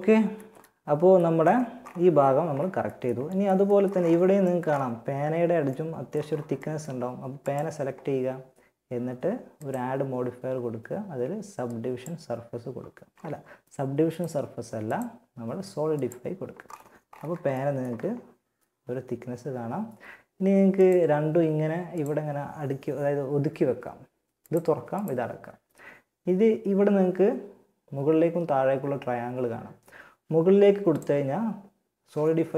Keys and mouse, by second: 6.6-8.4 drag, 8.8-10.4 drag, 13.3-15.8 drag, 20.0-23.0 drag, 23.6-26.0 drag, 30.1-31.9 drag.